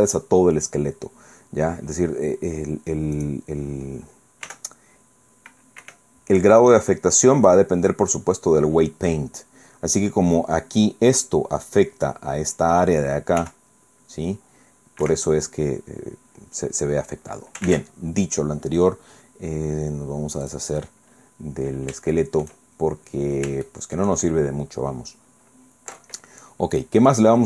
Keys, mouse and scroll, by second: 1.9-2.4 scroll down 1, 2.6 scroll down 1, 3.1 right click, 4.5 r, 5.8 Escape, 6.5 right click, 13.4 r, 15.0 Escape, 15.5 scroll down 1, 15.9 scroll up 1, 17.7 ctrl+Tab, 20.5 click, 21.0 scroll down 2, 21.1 scroll up 2, 21.3 scroll down 2, 22.1 shift+click, 23.2-23.6 scroll up 1, 23.7 shift+click, 24.9 scroll down 1, 26.7-27.4 drag.